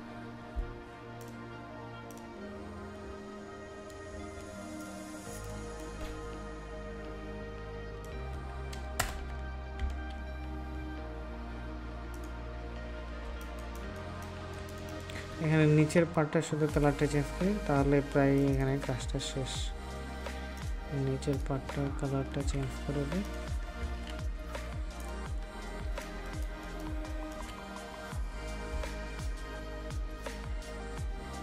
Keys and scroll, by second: 9.7 ctrl+s, 22.4 ctrl+v, 23.7 ctrl+s, 26.0 ctrl+space.